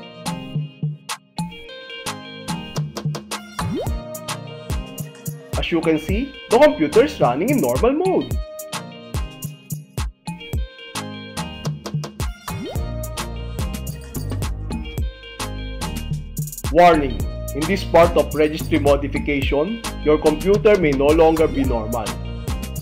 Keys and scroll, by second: 0.3 Return, 4.5 space, 15.7 space.